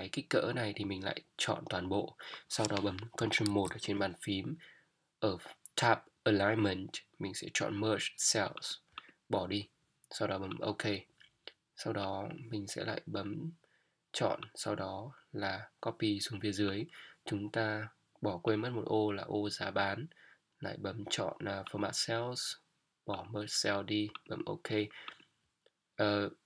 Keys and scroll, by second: 3.2 Up.